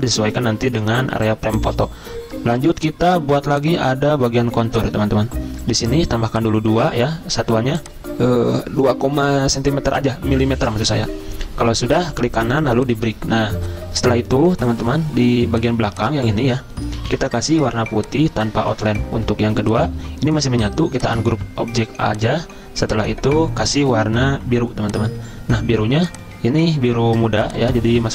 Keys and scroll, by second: 17.1 ctrl+z.